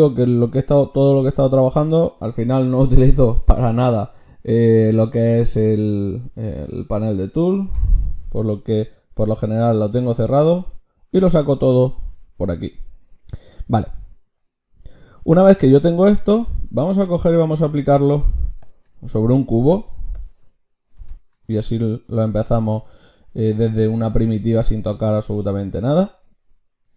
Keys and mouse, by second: 7.8 t, 11.0 ctrl+shift+q, 18.3 x, 19.0 shift+a, 20.6 click, 21.5-26.9 drag.